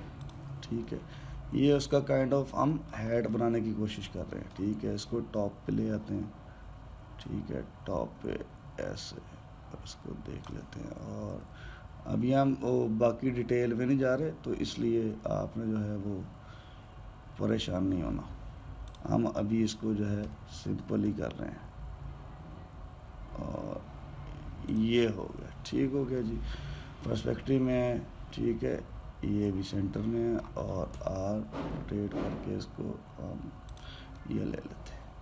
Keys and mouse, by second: 1.7-4.0 middle drag, 5.1 alt+middle click, 8.0 click, 12.1 r, 21.0 r, 27.0-30.1 middle drag, 31.7 r, 34.9-35.2 middle drag.